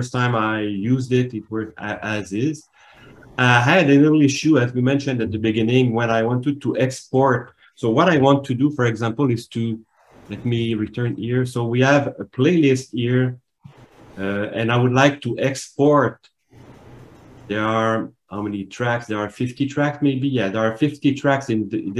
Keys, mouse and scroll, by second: 11.2 alt+shift+Tab, 16.5 click.